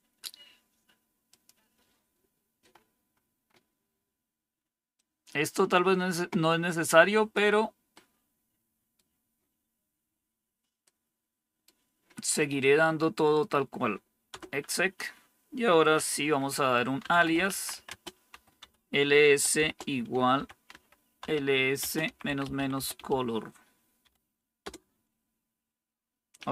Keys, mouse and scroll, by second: 1.2 click, 2.6-4.7 scroll down 4, 4.7 scroll down 1, 4.9-7.3 drag, 7.9-8.9 right drag, 10.8 right click, 12.5 right click, 14.2 Return, 16.7-23.9 typing, 24.5 Return.